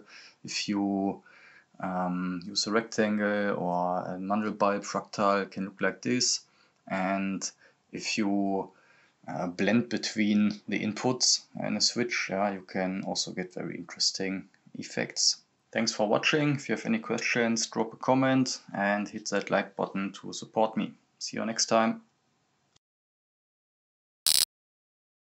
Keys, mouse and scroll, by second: 22.4 click.